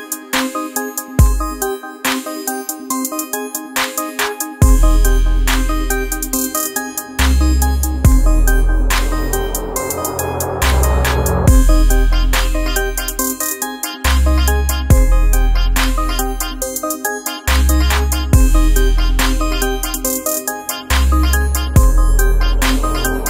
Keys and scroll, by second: 0.1 Left, 0.2 Left, 0.4 Left, 0.5 Left, 2.3 Up, 2.9 Up, 3.3 Down, 9.5 Right, 14.6 BackSpace, 16.6 Left, 17.2 Left, 19.0 Left, 20.0 Right.